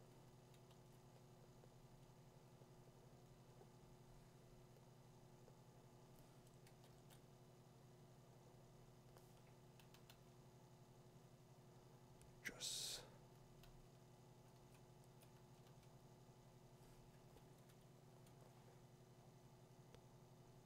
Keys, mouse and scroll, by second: 0.3 [, 0.7 [, 6.7 [, 6.9 [, 9.8 ], 10.1 ], 13.6 ], 13.9 ], 14.5 ], 15.2 click, 15.7 4, 15.7 2, 19.1 [.